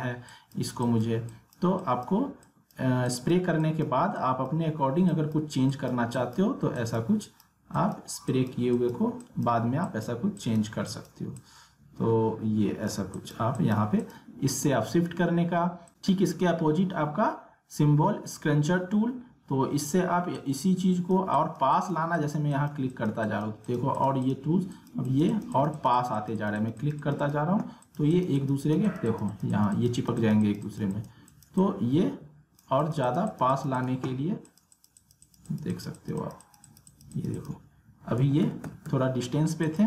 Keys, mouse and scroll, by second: 20.3-32.8 drag, 38.2 ctrl+z, 39.6 click.